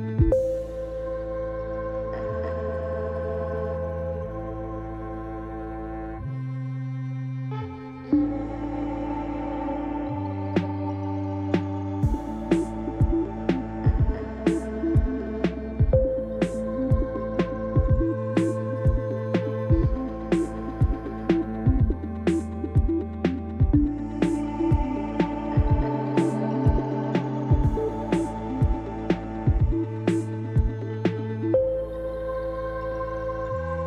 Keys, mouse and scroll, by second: 0.4 shift+a, 5.1 middle click, 5.6-7.4 drag, 7.2 s, 7.4-10.6 middle drag, 8.5 typing, 14.0 g, 18.3 ctrl+a, 18.3-21.9 ctrl+middle drag, 21.9 click, 22.9 middle click, 23.2-33.8 drag.